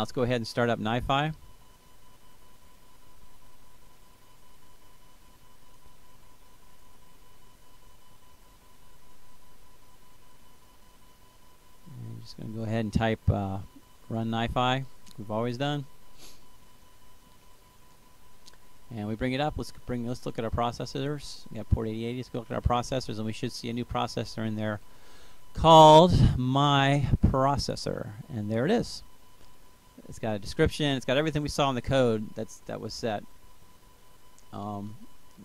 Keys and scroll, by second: 4.7-5.6 typing, 7.4 Return, 11.0-13.4 typing, 13.5 Tab, 14.2 Return.